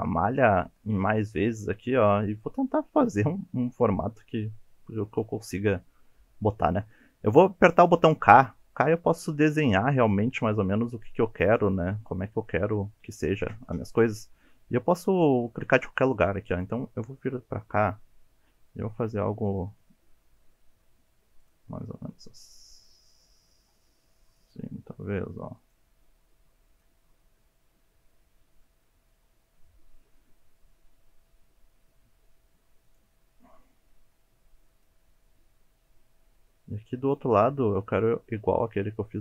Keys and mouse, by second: 7.9 k.